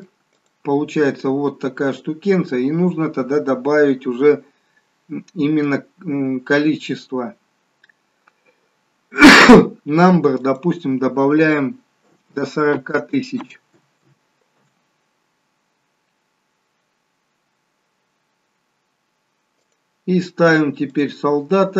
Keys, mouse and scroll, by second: 0.6 click, 1.7 middle click, 5.4 scroll up 5, 10.7 click, 21.0 click.